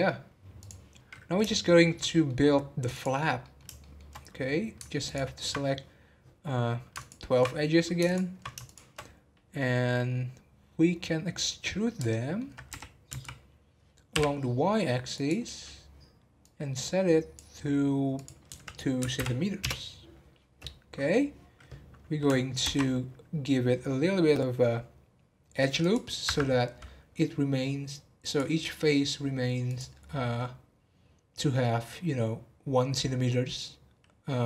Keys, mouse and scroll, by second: 0.5 click, 1.0-1.7 scroll down 3, 1.7 shift+middle click, 2.4-2.9 scroll up 2, 2.9 click, 3.4 middle click, 3.6 scroll up 1, 3.7 shift+middle click, 4.2-5.0 scroll down 3, 5.0 ctrl+click, 6.9 ctrl+click, 8.0 ctrl+click, 8.6 shift+click, 9.5-12.7 middle drag, 12.7 e, 18.1-21.1 drag, 22.6 ctrl+r, 26.6 scroll up 2, 28.2 click, 28.6 middle click, 28.9 scroll down 1, 29.6 click, 30.4-33.5 middle drag.